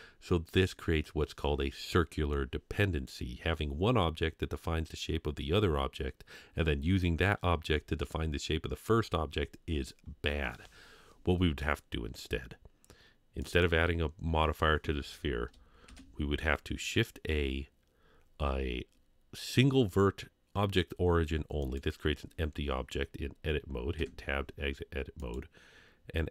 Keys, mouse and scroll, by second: 10.8 scroll down 2, 11.6-11.9 scroll up 2, 13.4 click, 15.8 shift+a, 24.0 Tab.